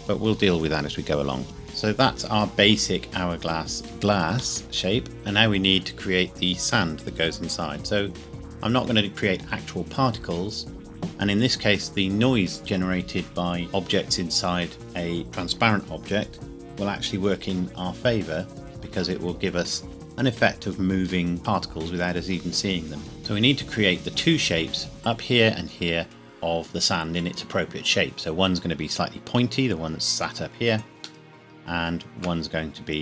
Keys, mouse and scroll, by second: 1.6 middle click, 2.3 scroll down 1, 3.0-3.7 scroll down 1, 3.7-4.1 scroll up 1, 4.6 middle click, 5.1 scroll up 1, 31.0 scroll up 1, 31.3 shift+middle click.